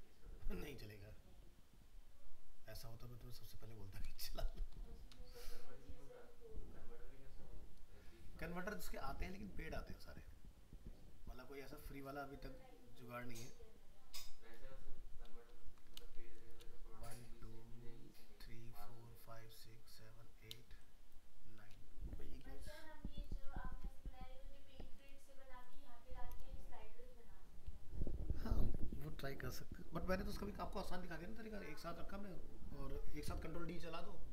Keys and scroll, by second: 15.3 ctrl+-.